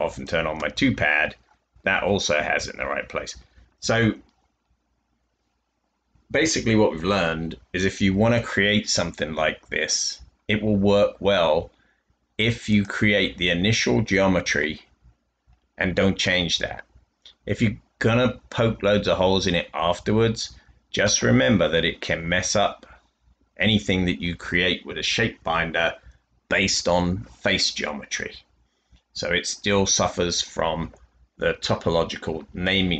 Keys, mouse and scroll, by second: 1.8 scroll down 2, 2.0 scroll up 2, 2.1 scroll down 2, 2.1 scroll up 2, 2.2-2.8 scroll down 2.